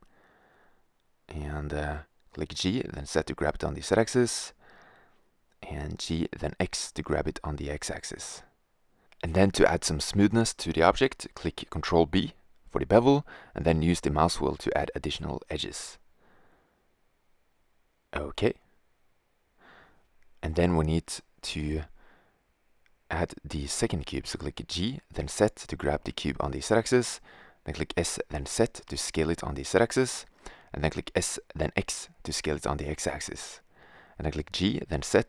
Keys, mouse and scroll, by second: 1.2 g, 4.6 g, 6.7 g, 9.4 Tab, 10.7 ctrl+b, 15.8 Tab, 18.5-21.9 middle drag, 21.9 shift+a, 23.1-24.5 drag, 24.4 g, 26.5 s, 30.0 s, 33.2 g.